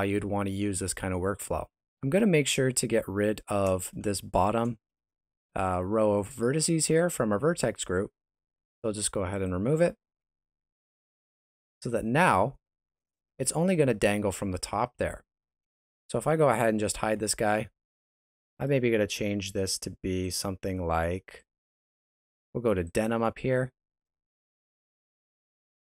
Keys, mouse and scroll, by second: 1.7 Tab, 2.4 Tab, 3.3 alt+right click, 4.1 shift+middle click, 7.6 click, 9.3 click, 10.3 alt+a, 10.7 Tab, 12.0 right click, 12.8 middle click, 14.8 shift+middle click, 16.1 right click, 17.0 h, 18.5 right click, 20.2 click, 21.4 click, 24.5 right click, 25.2 shift+middle click.